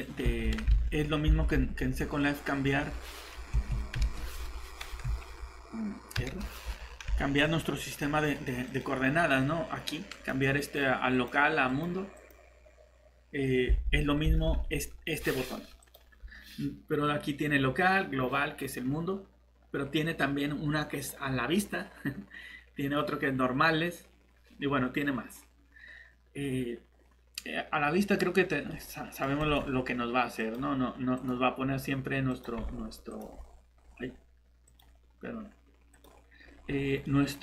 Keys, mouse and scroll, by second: 0.2 Escape, 0.8 alt+Tab, 1.3 alt+Tab, 2.6 scroll down 1, 3.9 ctrl+shift+t, 7.4 click, 8.3 right click, 8.6 click, 13.8 alt+Tab, 14.4 Tab, 28.7 middle click, 29.4 click, 32.6-33.1 scroll down 1, 33.1 click, 33.3 scroll down 1, 33.7-34.7 scroll up 1, 34.7 click, 36.4-37.0 scroll up 1, 37.0 middle click.